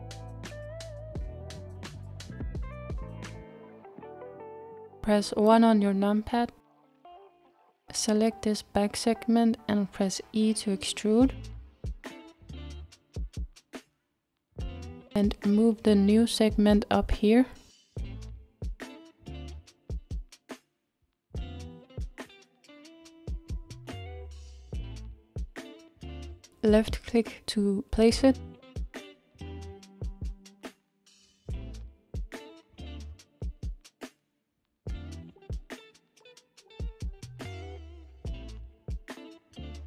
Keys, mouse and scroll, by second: 0.8 KP_1, 2.5-3.6 scroll up 2, 3.6 g, 9.2 click, 11.3 e, 35.0 click, 35.9 g.